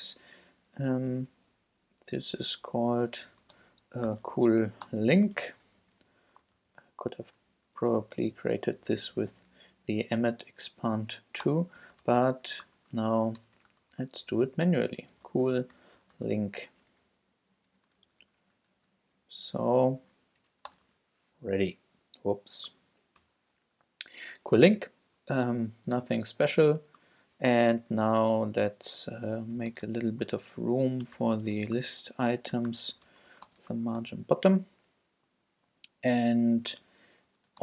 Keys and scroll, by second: 0.2 shift+Up, 0.7 alt+Left, 1.1 alt+Right, 3.2-5.8 typing, 6.4 alt+shift+super+Left, 6.5 alt+shift+super+c, 6.9 Down, 7.7 alt+super+Down, 7.8 alt+Left, 8.3 Left, 8.6 super+v, 8.8 super+Up, 9.4 alt+Up, 9.5 alt+Left, 11.0 alt+Right, 11.5-13.8 typing, 14.3 shift+Left, 14.9-16.8 typing, 16.9 alt+shift+Left, 18.0 alt+shift+super+Left, 18.1 shift+super+c, 18.4 Down, 19.2 alt+super+Down, 19.3 alt+Left, 20.4 alt+Right, 20.7 space, 20.8 super+v, 23.2 BackSpace, 29.3-34.6 typing, 30.4 shift+Return, 34.6 Down, 36.8 Return, 37.5-37.6 typing.